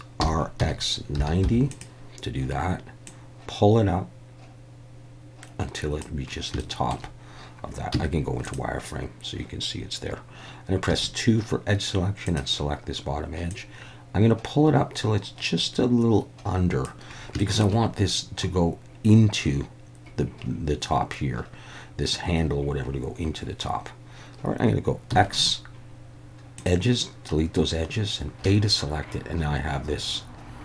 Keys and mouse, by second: 0.2-1.4 typing, 1.7 click, 3.1-6.0 drag, 6.7 shift+middle click, 7.9 z, 10.9 2, 12.3 click, 13.6-16.8 drag, 17.4 shift+middle click, 25.1 x, 28.4 a.